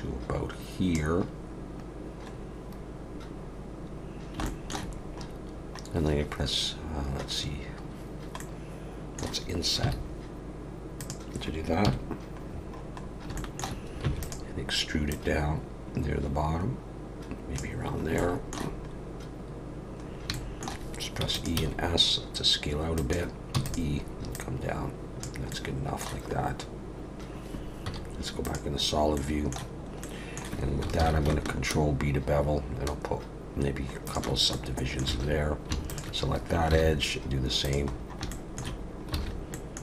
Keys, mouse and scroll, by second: 2.4-4.1 scroll up 1, 4.1 scroll down 1, 4.4 shift+middle click, 5.0 scroll up 2, 5.6 scroll up 2, 8.4 middle click, 11.8 KP_1, 12.5-13.3 scroll down 7, 13.3 shift+middle click, 14.0 e, 15.1 click, 17.9 scroll up 3, 18.2 shift+middle click, 20.0 scroll up 2, 20.3 shift+middle click, 21.2 e, 21.5 s, 23.5 e, 24.3 click, 25.5 middle click, 26.4 scroll up 1, 27.0 scroll up 2, 27.8 z, 28.9-29.2 scroll up 2, 29.1 middle click, 29.7 scroll up 2, 30.0 middle click, 31.0 ctrl+b, 34.5 middle click, 35.1 alt+a, 35.9 alt+shift+click, 36.7 ctrl+b, 37.9 scroll down 4, 38.3 shift+middle click, 38.8 scroll down 2, 39.2 alt+a, 39.5 middle click.